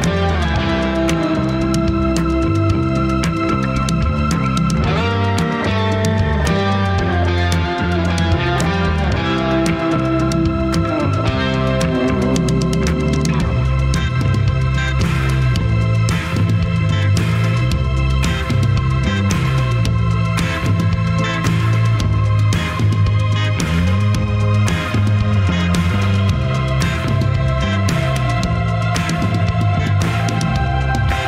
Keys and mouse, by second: 0.0-2.3 right drag, 3.2-5.8 middle drag, 8.7 middle click, 10.4 alt+p, 13.5 Tab, 14.7 click, 15.6 click, 17.9 ctrl+p, 19.3 alt+p, 21.0 click, 21.7 click, 22.2 g, 24.3 ctrl+s, 25.6 click, 25.8-31.2 drag, 27.5 BackSpace, 29.8 n.